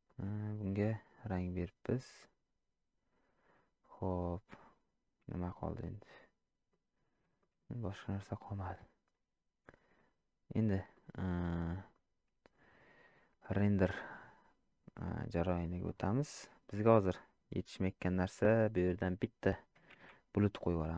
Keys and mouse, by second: 0.1 click, 2.2-3.5 middle drag, 4.6-6.7 middle drag, 7.4 shift+middle drag, 7.9 middle click, 9.6-10.0 middle drag, 10.9 middle click, 16.9 shift+middle click, 17.7 middle click.